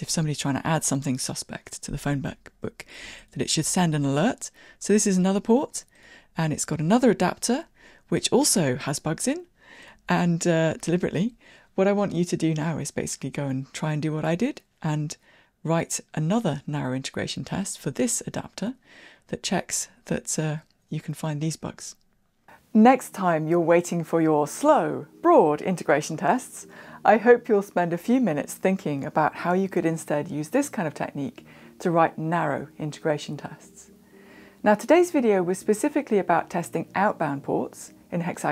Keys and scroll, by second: 3.4 super+b.